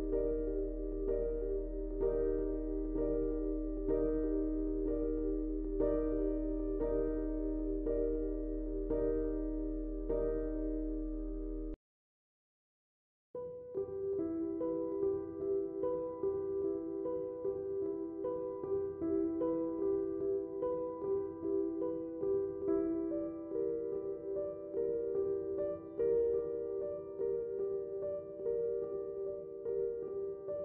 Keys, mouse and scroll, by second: 2.9 click, 6.0-7.4 drag, 7.4 right click, 9.2 click, 10.0 click, 12.7 click, 18.2 ctrl+a, 19.0 click, 21.0 typing, 22.6 click, 22.6 typing, 24.5-27.2 drag.